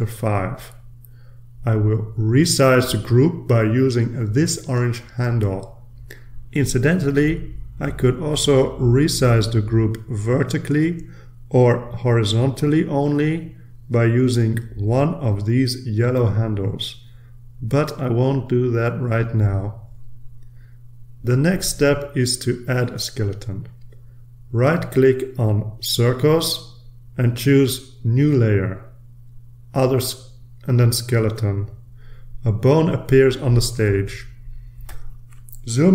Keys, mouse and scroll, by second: 0.4-3.0 typing, 3.5 Return, 6.4-10.2 drag, 10.8-13.5 drag, 14.1-15.4 drag, 17.7 ctrl+z, 26.4 click, 27.2 click, 33.0 click, 35.5-35.9 ctrl+scroll up 2.